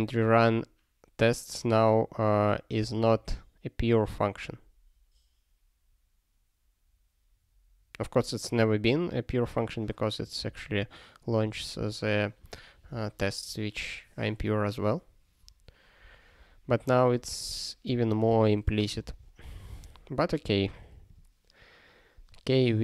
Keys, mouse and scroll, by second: 9.6 click, 10.2 click, 10.4 click, 11.4 click, 11.6 double click, 11.8 click, 12.4 click, 17.1 click, 17.3 double click, 17.5 click, 18.3 click, 19.0 ctrl+s, 21.1 click.